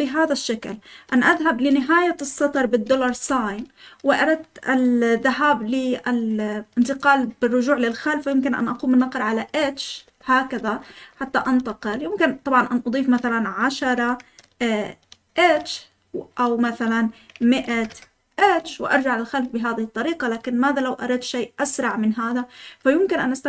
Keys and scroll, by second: 3.1 shift+4, 9.6-14.3 typing, 15.3 typing, 17.3-18.4 typing.